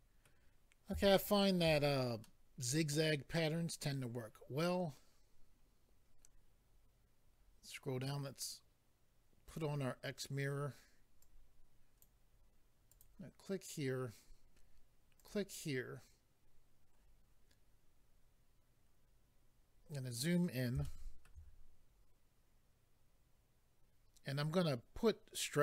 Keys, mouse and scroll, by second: 0.2 scroll down 3, 0.2 middle click, 1.0 shift+middle click, 1.5 middle click, 1.8-2.2 scroll down 1, 2.2 middle click, 5.1-6.2 scroll down 4, 9.5 click, 9.6 click, 11.2 click, 12.9 click, 13.0 click, 15.2 click, 15.3 click, 19.6-20.8 scroll up 2, 20.8 shift+middle click.